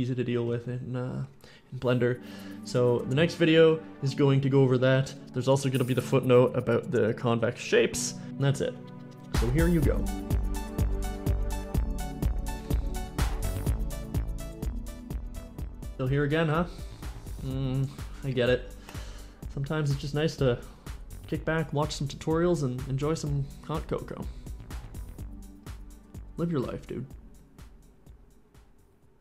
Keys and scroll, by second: 0.0-0.8 typing, 1.9 s, 15.7-18.1 typing.